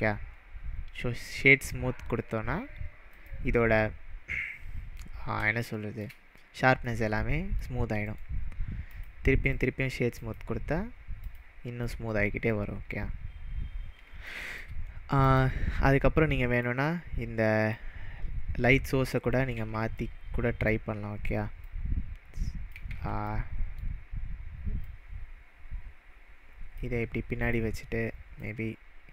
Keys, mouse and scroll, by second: 1.5-3.1 scroll down 2, 3.2 click, 4.7-5.3 scroll down 3, 5.6-6.1 shift+middle drag, 8.0-11.2 right drag, 8.8 click, 10.1 click, 11.2 click, 11.9-12.7 middle drag, 13.4-14.0 scroll down 4, 14.3-14.8 shift+middle drag, 15.2 click, 16.5-17.8 drag, 19.5 ctrl+z, 19.9-20.8 middle drag, 21.6-22.8 click, 22.9 ctrl+z, 23.2-23.8 middle drag, 24.8-26.9 click, 27.4-28.5 drag.